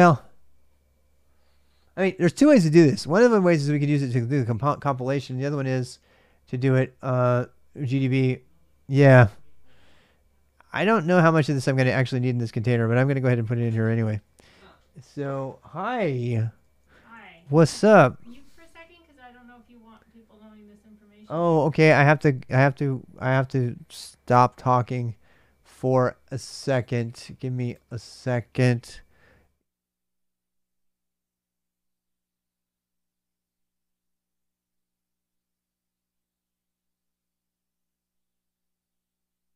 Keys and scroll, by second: 11.3 l, 13.3-14.6 typing, 15.6-17.7 typing.